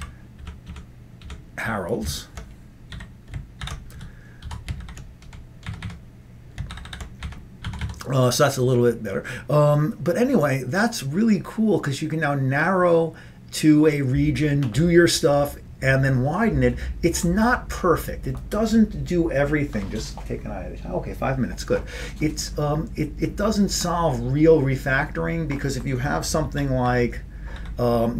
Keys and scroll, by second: 0.0-0.5 typing, 0.8 Delete, 1.3 Delete, 3.0-4.2 typing, 4.6 Down, 4.9 ctrl+g, 5.8 Up, 5.9 Up, 6.5-7.3 typing, 7.3 Up, 7.7 Down, 7.9 Down, 26.5 ctrl+x, 27.6 ctrl+g.